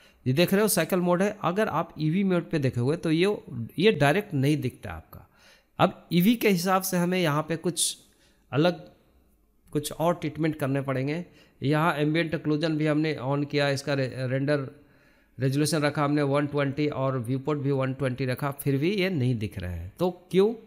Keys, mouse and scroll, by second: 1.9-3.1 scroll up 1, 3.1-9.2 drag, 9.4-20.6 drag.